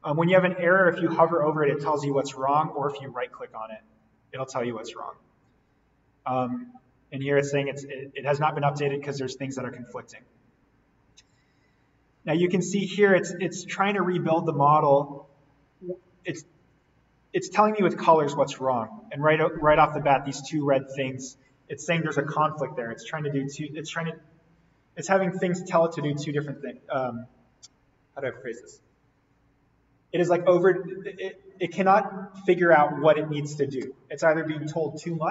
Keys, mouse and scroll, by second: 2.5 right click, 8.2 click, 9.5-10.0 scroll down 1, 11.8-12.9 scroll up 1, 12.9-15.1 scroll down 1, 15.1 scroll up 1, 16.9-19.7 scroll down 1, 20.6-23.0 scroll down 1, 26.4 click.